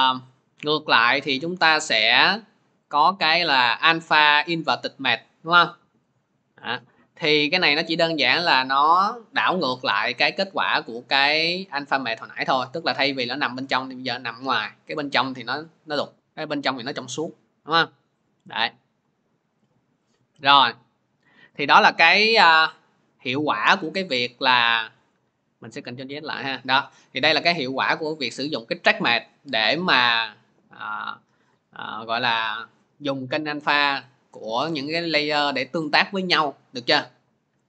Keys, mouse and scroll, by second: 2.8 click, 4.7 click, 6.0-13.8 drag, 15.8 middle click, 23.3 middle click, 24.2 ctrl+z, 24.8 ctrl+z, 26.4 ctrl+z, 26.4 middle click.